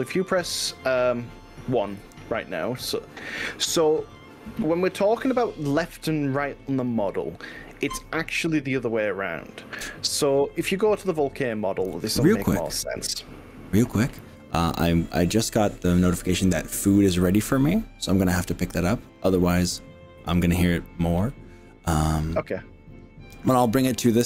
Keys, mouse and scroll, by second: 2.0 KP_1.